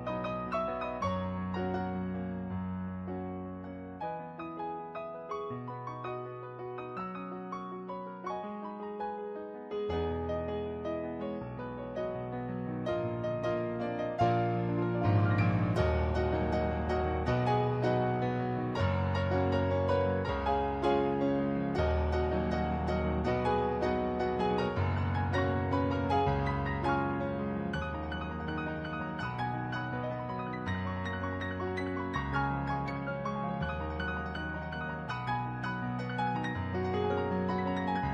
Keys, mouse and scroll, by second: 0.5 ctrl+z, 1.1 ctrl+z, 2.2 ctrl+z, 2.8 ctrl+z, 3.7 ctrl+z, 4.1 ctrl+z, 5.1 ctrl+z, 5.3 ctrl+z, 5.6 ctrl+z, 5.9 ctrl+z, 6.5 ctrl+z, 7.6 ctrl+z, 8.5 ctrl+z, 10.2 ctrl+z, 11.1 ctrl+z, 11.6 ctrl+z, 12.5 ctrl+z, 16.5 ctrl+z, 16.8 ctrl+z, 17.1 ctrl+z, 17.5 ctrl+z, 17.8 ctrl+z, 18.3 ctrl+z, 19.6 ctrl+z, 20.7 ctrl+z, 21.5 ctrl+z, 24.2 ctrl+z, 24.9 ctrl+z, 25.5 ctrl+z, 26.3 ctrl+z, 26.5 ctrl+z, 27.9 ctrl+z, 28.6 ctrl+z, 29.8 ctrl+z, 30.0 ctrl+z, 30.4 ctrl+z, 30.8 ctrl+z, 31.0 ctrl+z, 31.3 ctrl+z, 33.5 ctrl+z, 34.0 ctrl+z, 34.7 ctrl+z, 35.1 ctrl+z.